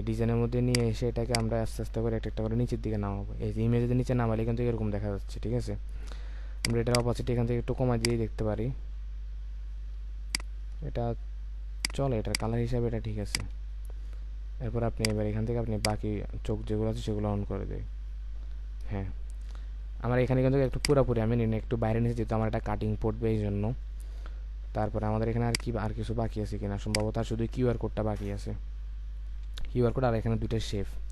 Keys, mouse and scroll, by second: 7.0 double click, 10.3 ctrl+click, 12.3 double click, 13.6-15.2 alt+scroll down 1, 20.7 space, 23.0 space.